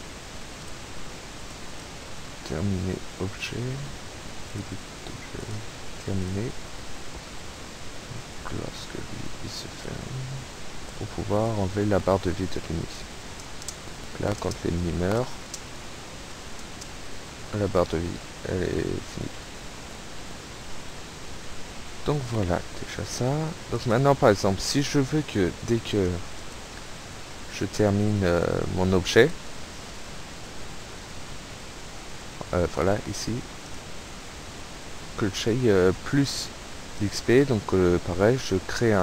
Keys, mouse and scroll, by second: 0.6 click, 1.4 click, 4.5 click, 5.5 click, 6.3 click, 7.3-7.7 shift+scroll down 2, 8.8-11.1 drag, 11.4 click, 12.7 p, 13.7 space, 14.5 space, 16.7 space, 17.4 Right, 18.6 Left, 19.2 Right, 19.9 Escape, 23.8 right click, 26.3 click, 27.6-28.1 shift+scroll down 2, 29.1 click, 32.3 shift+scroll up 2, 33.7 click, 35.3-36.6 drag, 37.0 click, 38.8 click.